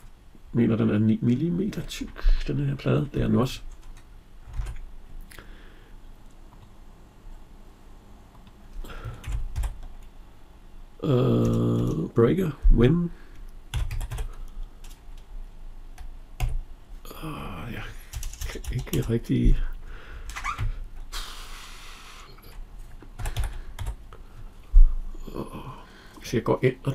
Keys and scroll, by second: 4.3 alt+Tab, 11.2 BackSpace, 17.9 BackSpace.